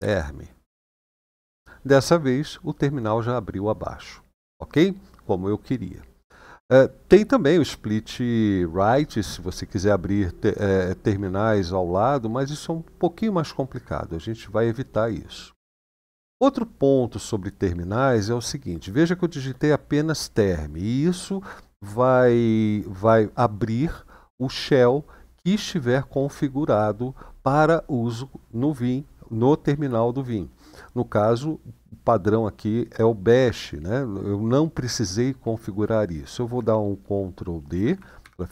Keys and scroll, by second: 0.0-0.5 typing, 1.0 Return, 38.0 ctrl+d.